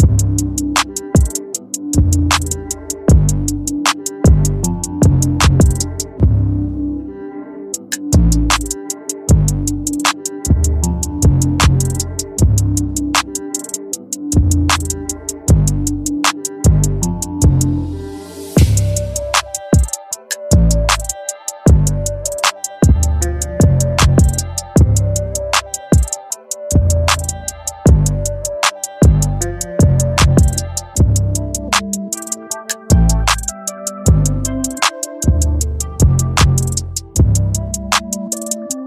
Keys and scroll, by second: 2.3 Return, 24.3 Return.